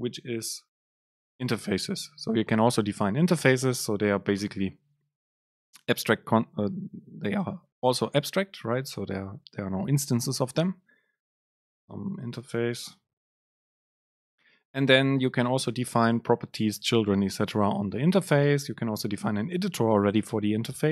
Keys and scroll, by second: 14.2 Down, 15.3 Up, 15.4 Down, 15.8 Up, 16.3 Down.